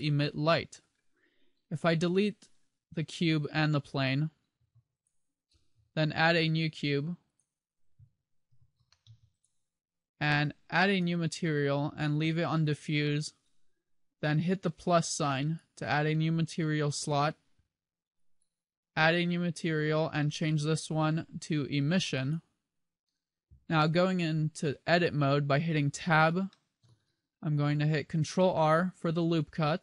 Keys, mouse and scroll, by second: 0.6 middle click, 2.1 middle click, 3.4 shift+right click, 4.7 x, 6.2 shift+a, 8.5 g, 9.6 click, 10.8 click, 15.6 click, 18.3 click, 20.1 click, 24.0-24.9 scroll up 2, 24.9 Tab, 24.9-26.2 scroll up 1, 26.2 shift+middle click, 27.2-28.1 scroll up 2, 27.2 a, 28.6 ctrl+r.